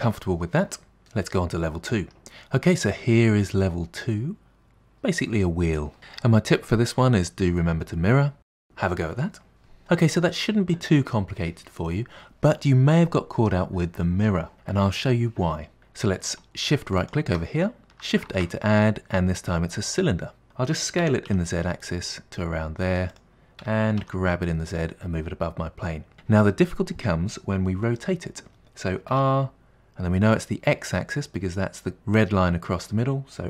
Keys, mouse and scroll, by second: 2.2 n, 2.6-5.6 middle drag, 17.0 shift+right click, 17.6 shift+middle click, 18.3 shift+a, 21.1 s, 23.6 g, 29.1 r.